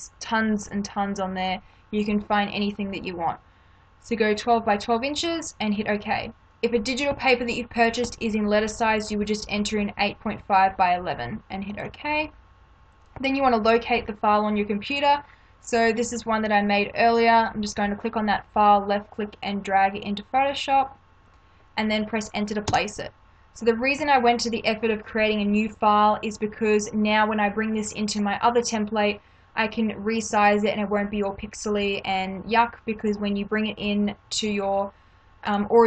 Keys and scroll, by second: 19.3 space, 22.7 Return, 35.5 space.